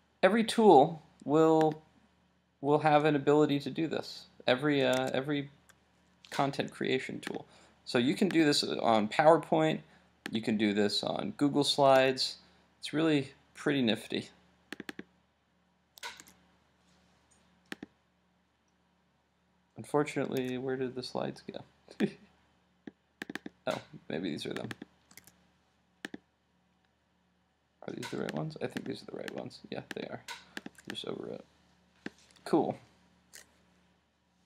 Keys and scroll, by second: 5.0 super+Tab.